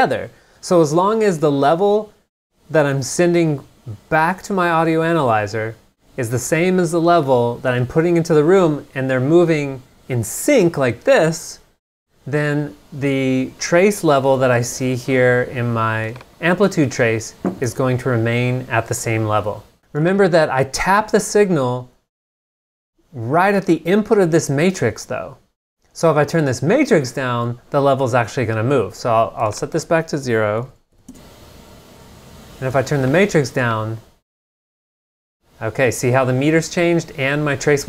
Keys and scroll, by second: 17.7 super+Tab, 30.7 super+a, 31.1 Return.